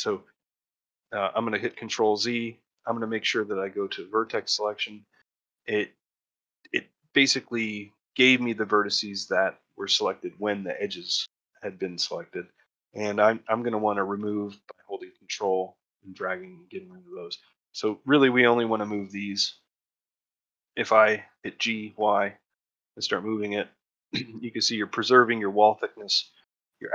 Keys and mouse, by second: 3.3 click, 4.7 shift+middle click, 9.7 middle click, 12.7 middle click, 14.9 ctrl+click, 16.3 middle click, 17.7 shift+middle click, 19.4 middle click, 19.7 shift+middle click, 20.1 ctrl+middle click, 20.3 shift+middle click, 20.6 middle click.